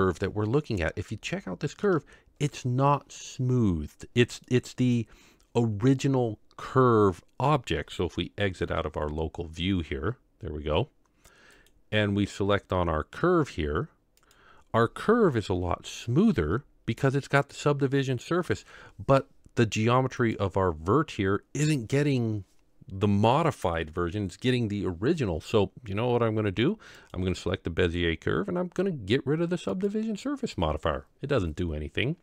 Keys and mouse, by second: 1.3-1.9 shift+middle drag, 4.5-5.1 middle drag, 8.6 KP_Divide, 15.2 KP_Divide, 18.4 KP_Divide.